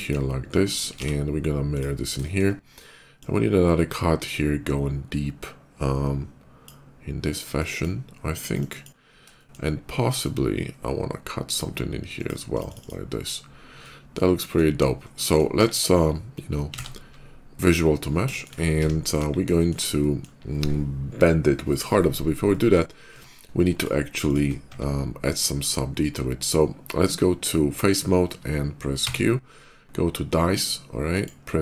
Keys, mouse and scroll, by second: 0.8 alt+x, 1.6 click, 2.1 shift+middle click, 2.9-6.5 shift+drag, 7.4 click, 8.2 click, 8.4 click, 9.2 shift+middle click, 9.9-11.4 shift+drag, 12.0 shift+click, 12.4 click, 12.5 click, 12.6 click, 13.6 middle click, 14.1 middle click, 15.0 middle click, 15.5 KP_5, 16.6 ctrl+a, 18.2 shift+middle click, 18.6 scroll down 1, 18.9 KP_5, 19.4 middle click, 19.8 middle click, 22.0 shift+middle click, 22.3 shift+middle click, 23.0 Tab, 23.5 click, 24.1 shift+click, 28.9 q, 30.8 click.